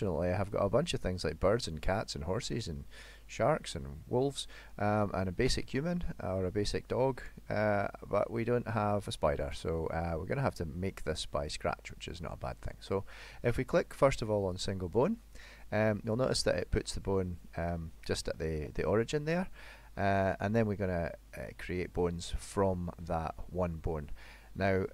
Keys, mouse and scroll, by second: 15.9 middle click, 19.2 middle click, 22.8 middle click.